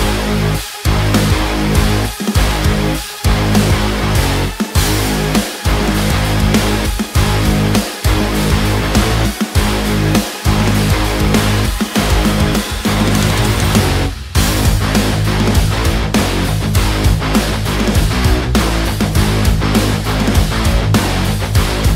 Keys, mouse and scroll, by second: 3.3 click, 5.4-9.6 drag, 11.7 click.